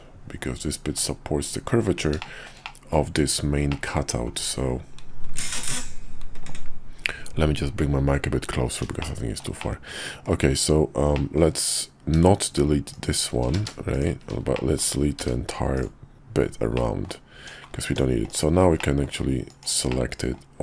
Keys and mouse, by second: 2.2 shift+middle click, 2.6 middle click, 3.7 middle click, 9.0 shift+middle click, 9.6 middle click, 11.1 middle click, 12.9 shift+click, 13.5 ctrl+z, 13.9 shift+click, 14.5 middle click, 15.2 x, 16.7 middle click, 17.4 Tab, 17.9 Tab, 18.3 click, 18.8 middle click, 19.5 ctrl+click, 19.9 middle click.